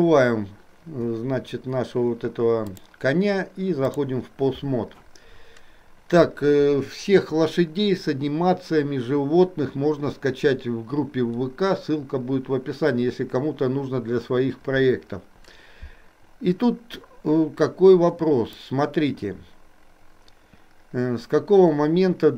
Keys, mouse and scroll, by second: 2.9-4.3 drag, 18.8-22.3 drag.